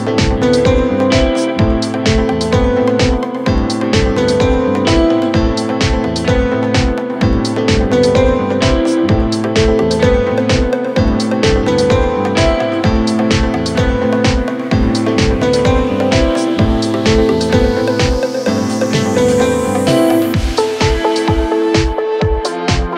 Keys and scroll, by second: 9.9 ctrl+Page_Down.